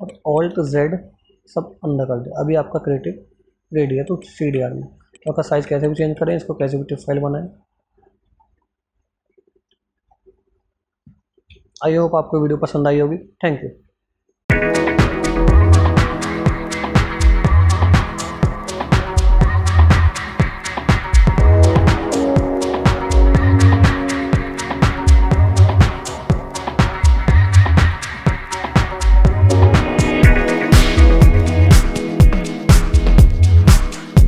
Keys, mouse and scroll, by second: 0.3 alt+z, 0.9 click, 2.3 scroll down 1, 2.7 click, 4.3 ctrl+z, 4.6 click, 5.3 ctrl+z, 6.0 ctrl+z, 6.6-7.3 scroll up 1, 7.3 click, 7.6 scroll up 1, 8.7 scroll down 1, 9.2 scroll up 1, 9.5 scroll down 1, 10.3-10.8 scroll up 1, 10.8 click.